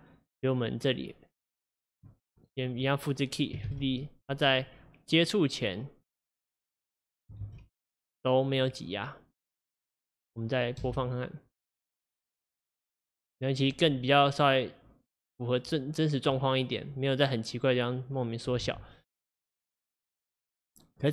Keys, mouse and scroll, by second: 2.5-3.5 drag, 3.5 shift+d, 5.3-7.4 drag, 7.4 shift+d, 18.7 space, 19.2-21.1 drag.